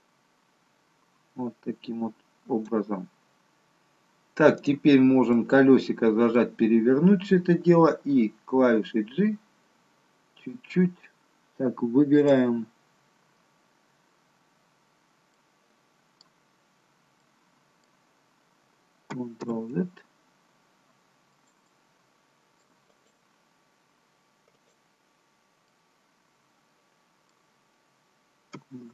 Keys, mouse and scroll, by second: 4.5 click, 5.3 middle click, 6.6-7.2 scroll up 3, 9.4 h, 12.2 click, 13.1 scroll up 3, 13.4-14.2 scroll down 1, 14.2-15.1 scroll down 2, 15.1 scroll down 1, 15.3 middle click, 16.5-17.2 scroll up 1, 17.2 middle click, 17.2-18.3 scroll up 1, 21.0 ctrl+z, 21.3 middle click, 21.6 middle click, 22.9 click, 24.5 click, 25.7 middle click, 25.7-26.5 scroll up 1.